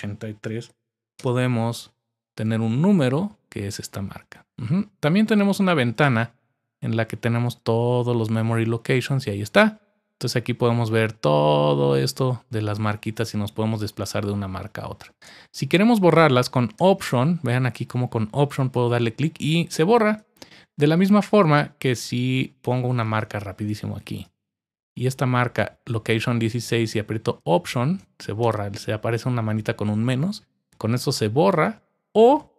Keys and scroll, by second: 0.0-1.2 typing.